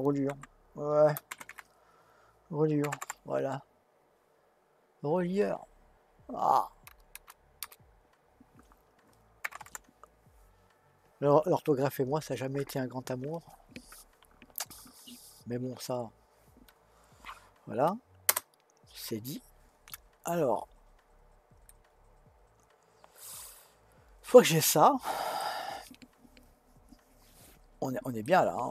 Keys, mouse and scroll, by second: 7.1 BackSpace, 21.6-24.7 middle drag, 28.2-28.7 middle drag.